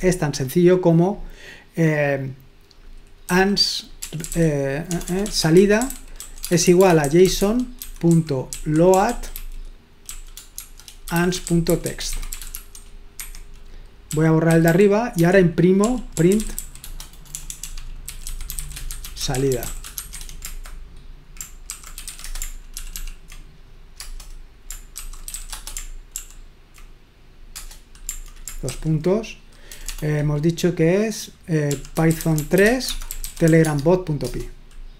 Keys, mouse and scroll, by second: 3.3-20.5 typing, 13.2 Escape, 21.9-22.6 typing, 22.9 ctrl+p, 23.0 ctrl+p, 24.1 Return, 24.9-26.9 typing, 26.1 ctrl+p, 27.6 Return, 28.7 shift+;, 30.0 BackSpace, 31.5-33.9 typing, 34.2 Return.